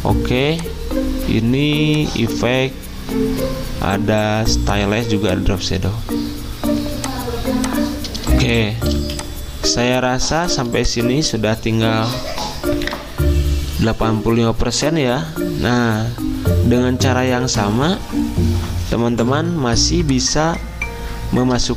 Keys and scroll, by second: 8.9 z.